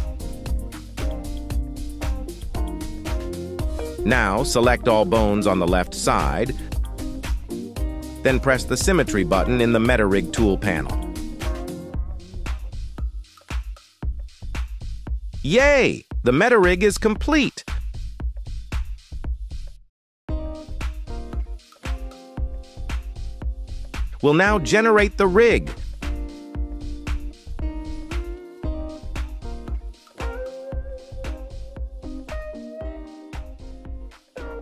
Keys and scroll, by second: 0.0 ctrl+v, 1.2 BackSpace, 1.4 3, 1.6 Return, 4.9 c, 7.6 g, 8.4 Escape, 13.4 /, 20.3 ctrl+s.